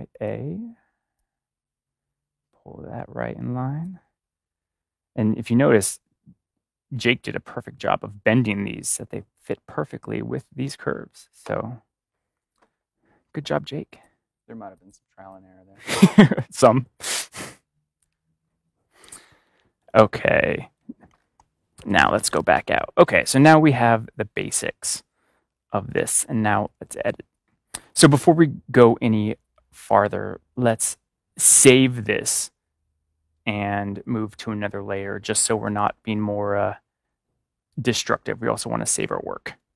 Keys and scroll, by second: 19.2-19.9 typing, 26.6 ctrl+=.